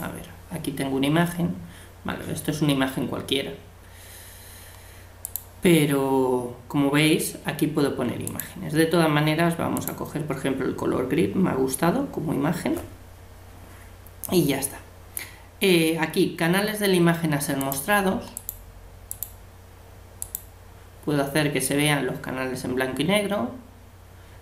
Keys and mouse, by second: 0.0-1.9 drag, 0.0-1.7 middle drag, 1.9-3.8 middle drag, 5.2-7.1 drag, 8.3-10.0 drag, 17.6-22.1 drag.